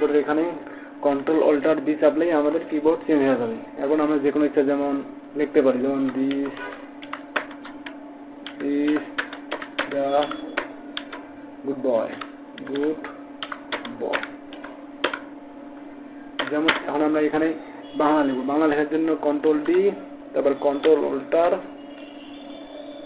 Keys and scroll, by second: 2.3 ctrl+alt+b, 20.0 ctrl+d.